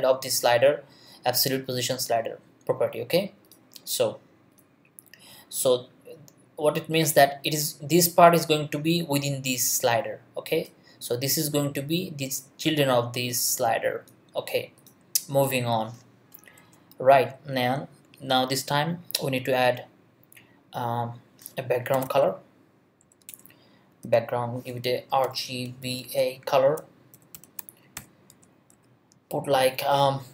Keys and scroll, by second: 16.6 Return, 21.7-22.5 typing, 23.0 Down, 23.3 Return, 23.9-27.9 typing, 28.3 Left.